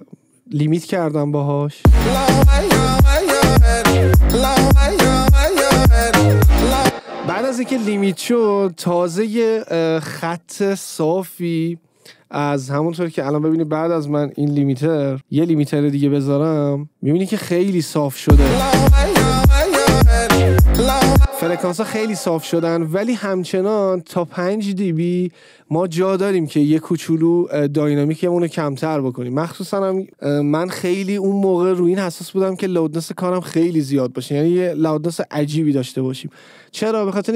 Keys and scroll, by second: 2.0 space, 7.1 space, 18.4 space, 21.4 space.